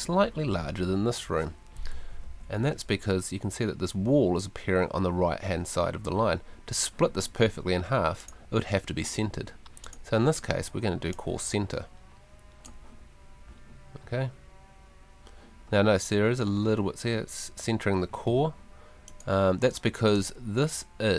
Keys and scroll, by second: 2.2 ↺.